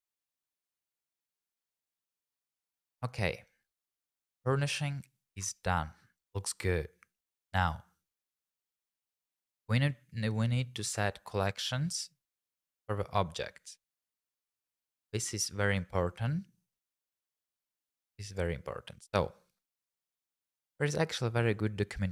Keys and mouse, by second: 0.8 middle click, 1.3 shift+middle click.